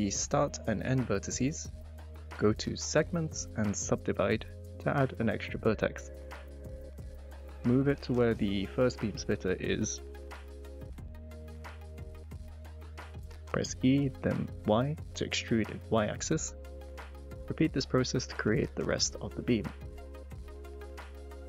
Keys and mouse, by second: 0.4 shift+click, 3.2-4.1 drag, 4.9 click, 5.7 middle click, 8.3 click, 8.7 g, 8.9 x, 9.4 y, 9.8 x, 12.0 s, 12.6 0, 12.9 Return, 15.7 e, 15.9 y, 20.6 shift+click, 20.8 shift+middle click, 21.0 click, 21.4 click.